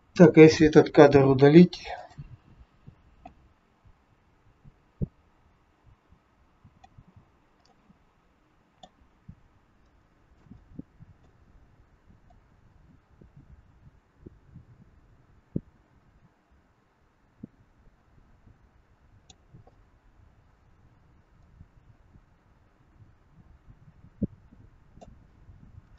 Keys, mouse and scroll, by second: 1.3 Delete, 3.2 click, 7.3-7.7 scroll down 4, 7.7 middle click, 9.2-9.8 scroll up 3, 9.8 shift+middle click, 10.7 middle click, 12.3 click, 21.4 click, 25.5-25.9 scroll down 2.